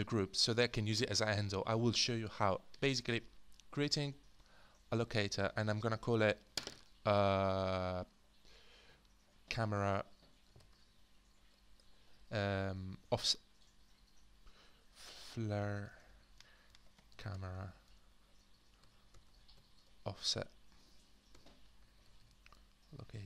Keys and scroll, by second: 3.1-4.1 space, 9.3-13.1 typing, 15.1-23.1 typing.